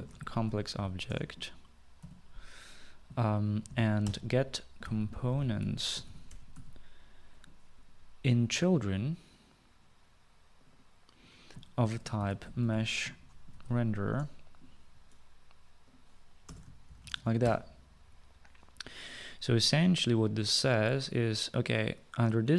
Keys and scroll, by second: 0.0-6.6 typing, 7.9-8.6 typing, 11.7-14.2 typing, 16.5-17.5 typing.